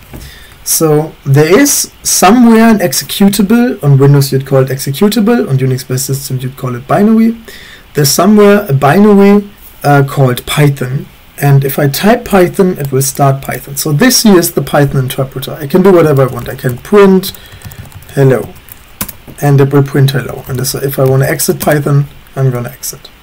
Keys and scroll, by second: 0.3 typing, 15.9-21.2 typing, 21.6 Return.